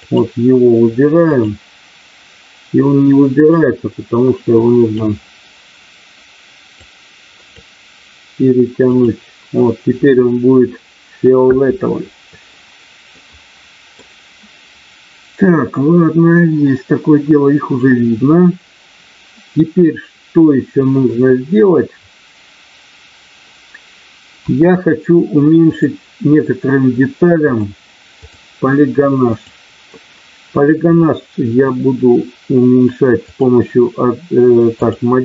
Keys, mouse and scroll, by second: 0.0 click, 1.3 click, 3.5-4.9 drag, 6.9 click, 8.9 click, 13.1 middle click, 24.4 KP_1, 25.6 click, 27.3 click, 29.3 click, 34.7-35.2 drag.